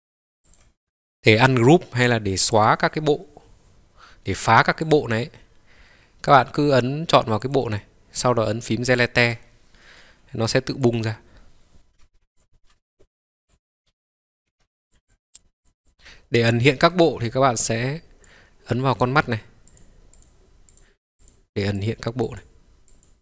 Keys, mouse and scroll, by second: 0.2-0.6 scroll down 2, 0.6 click, 0.8 middle click, 2.6-6.5 drag, 7.4 click, 9.2 Delete, 10.9 click, 12.0 Delete, 12.3 click, 12.7 Delete, 13.4 click, 14.0-14.6 ctrl+z, 14.9 click, 15.0 click, 15.6 click, 15.8 click, 19.8 click, 20.2 click, 20.9-21.9 drag, 22.3 click, 22.9 click.